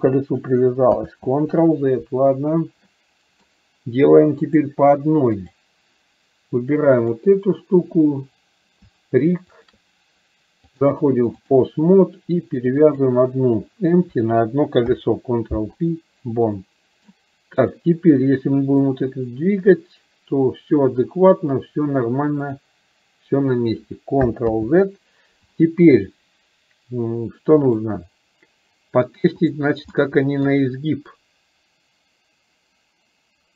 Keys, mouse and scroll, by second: 1.1 ctrl+z, 2.9-3.4 middle drag, 4.7-5.7 drag, 7.2 click, 9.7 shift+drag, 10.9 click, 13.1 click, 16.7-17.1 middle drag, 17.7 click, 19.1-22.6 drag, 24.6 ctrl+z, 27.7-28.8 drag, 29.4 click, 30.1-30.4 middle drag, 31.2-33.5 drag.